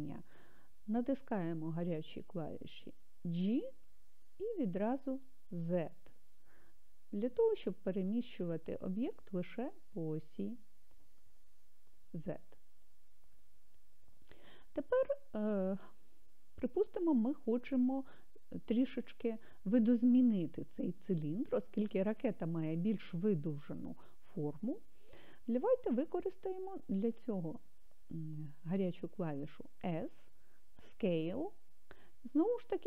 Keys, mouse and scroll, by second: 3.7 g, 5.6 z, 12.7-15.9 drag.